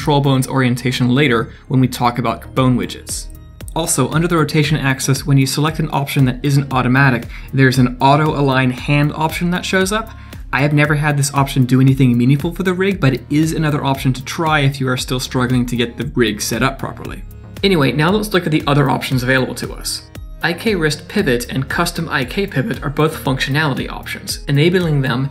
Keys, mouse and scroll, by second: 4.3 click.